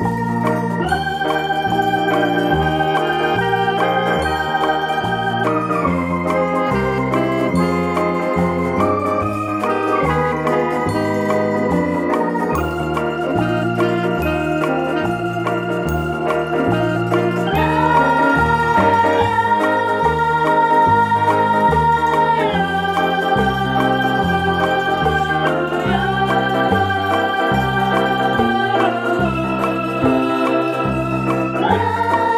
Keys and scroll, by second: 22.6 ctrl+0.